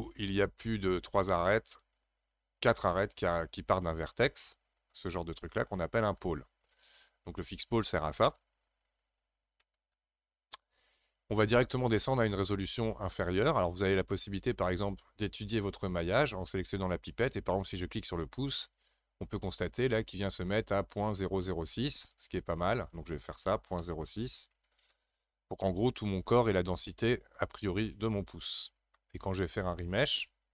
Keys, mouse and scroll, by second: 9.6 ctrl+z, 11.4-14.6 drag, 19.6-22.7 drag, 27.7-28.0 scroll down 2, 28.0-30.5 middle drag.